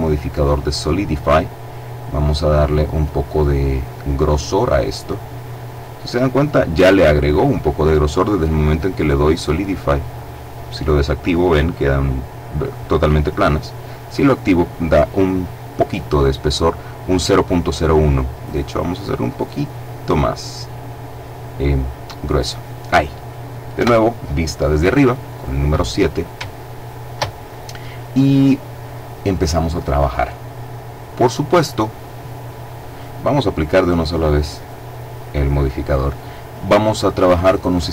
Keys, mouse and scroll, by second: 1.2 click, 2.1-3.7 middle drag, 4.3-4.7 scroll up 1, 4.7 middle click, 5.7-6.2 scroll down 1, 10.5 click, 13.1 click, 18.3-22.7 drag, 23.6 KP_7, 26.3-27.5 shift+middle drag, 31.9-33.2 middle drag, 33.8 click.